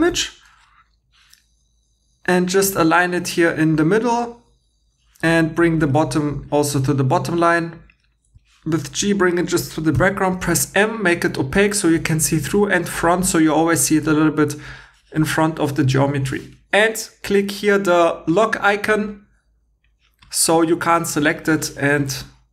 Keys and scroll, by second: 0.1 g, 8.3 g, 10.0 m.